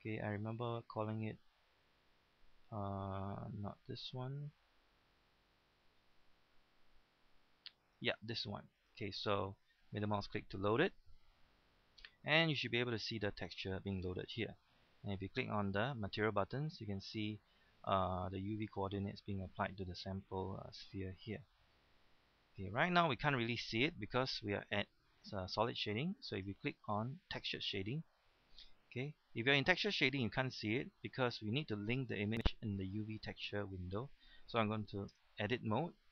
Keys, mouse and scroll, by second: 9.8-13.1 middle drag, 16.0-27.3 drag, 28.1 middle click, 28.8 scroll down 1, 29.0-30.9 middle drag, 35.1 Tab.